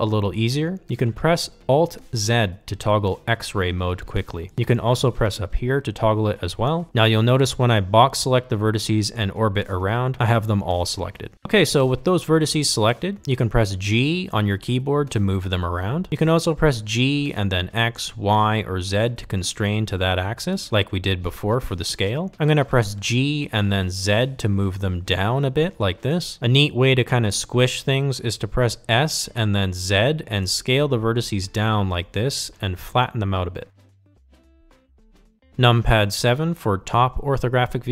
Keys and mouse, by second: 3.2 alt+z, 7.9-9.4 drag, 10.6-12.2 middle drag, 12.7 KP_1, 14.1 g, 26.6 shift+middle click, 28.7 s, 34.8 g.